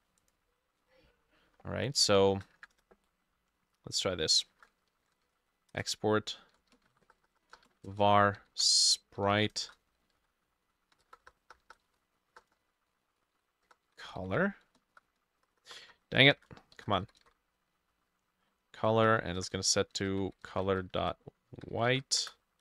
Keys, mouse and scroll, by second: 2.3 Return, 2.6 Up, 4.5-17.8 typing, 11.6-14.9 shift+drag, 11.8 shift+middle click, 12.6 middle click, 18.9-22.6 drag, 18.9-22.6 typing, 19.6 shift+middle click, 20.9 shift+middle click.